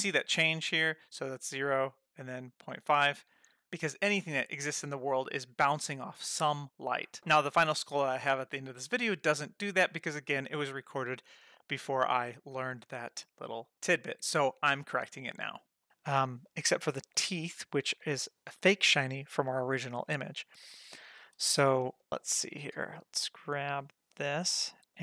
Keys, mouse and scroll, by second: 1.2-2.3 drag, 15.9 scroll down 1, 16.4 click, 17.1-17.6 middle drag, 17.7-18.2 scroll up 2, 18.0 shift+middle click, 20.4-20.8 scroll down 2, 20.6 shift+middle click, 20.9 middle drag, 21.5 shift+middle drag, 21.8 middle click, 22.1-22.4 scroll down 2, 22.5 click, 22.9 scroll up 1, 23.1 scroll down 1, 23.4-24.1 scroll up 1, 24.1 click, 24.4 g.